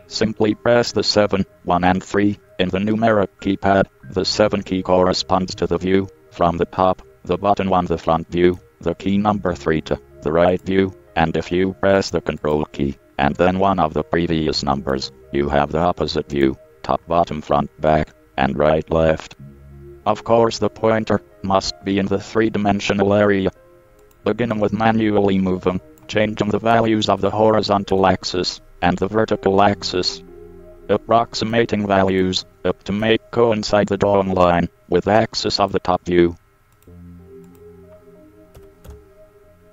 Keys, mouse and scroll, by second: 1.0-3.9 drag, 6.3-8.7 middle drag, 10.7 click, 10.8-12.3 middle drag, 11.5 click, 12.7 click, 13.1 middle click, 13.7 middle click, 13.9 click, 13.9-14.4 middle drag, 14.7 middle drag, 14.9-18.4 middle drag, 18.7 middle click, 18.8 middle click, 29.4-29.7 middle drag, 29.8 middle click, 31.6-34.5 drag, 35.7 click.